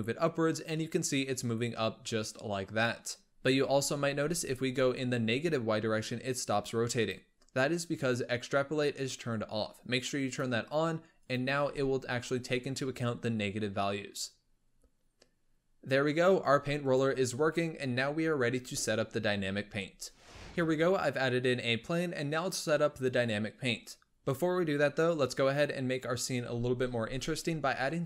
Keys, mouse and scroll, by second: 3.3 scroll up 2, 3.5 g, 6.8 click, 10.1 click, 11.1 click, 11.4 g, 15.3-20.3 middle drag, 20.3 n.